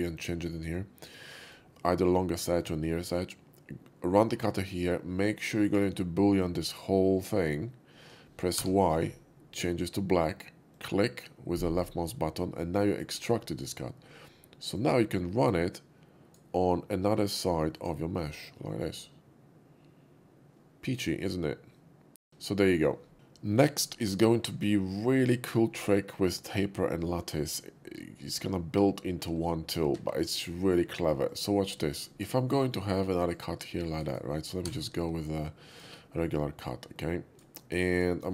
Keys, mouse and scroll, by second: 1.5-4.4 drag, 1.5 shift+v, 8.6 y, 10.7 click, 12.2-13.0 middle drag, 13.3 middle click, 14.6-16.3 drag, 17.8 click, 18.2-22.8 middle drag, 23.1 x, 23.4 middle click, 23.9 shift+middle click, 24.3 shift+middle click, 25.1-25.4 shift+middle drag, 31.1 click, 31.1 shift+a, 31.9 shift+middle click, 32.4 shift+middle click, 33.4-34.0 shift+drag, 34.1-34.6 shift+right drag, 34.6 d, 35.6 click, 36.4 click, 37.2 d, 38.0 shift+click.